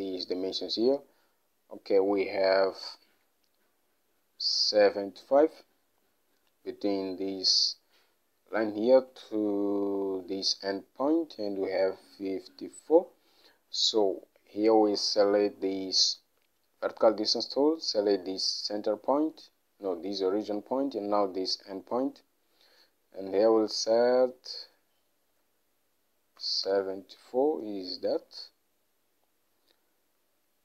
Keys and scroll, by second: 25.4 7, 26.5 4, 26.8 Return.